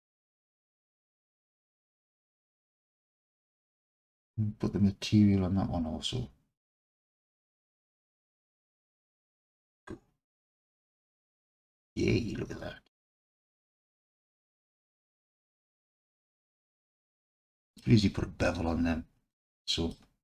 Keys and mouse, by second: 0.6 Tab, 2.3 alt+click, 7.2-7.6 alt+drag, 8.6 click, 11.8-14.6 alt+drag, 16.2-17.8 alt+drag, 19.3-19.9 alt+drag.